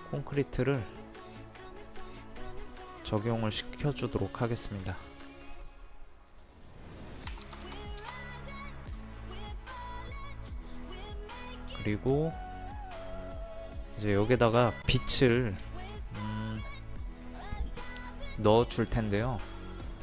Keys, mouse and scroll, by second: 1.8 right click, 2.8-3.9 drag, 7.3 KP_2, 7.5 KP_0, 9.8-12.8 drag, 13.6-15.4 middle drag, 15.6 middle click.